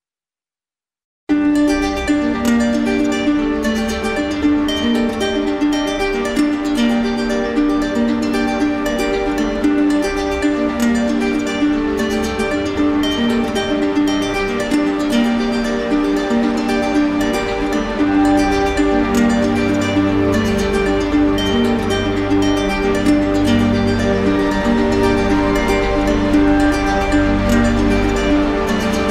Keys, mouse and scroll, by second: 1.6 right click, 3.1 click, 4.6 click, 4.9 ctrl+z, 5.7 click, 6.0 click, 6.1 ctrl+z, 10.4 click, 12.8 click, 15.3 click, 16.0 alt+right click, 16.4 ctrl+z, 27.6 ctrl+click, 28.8 click.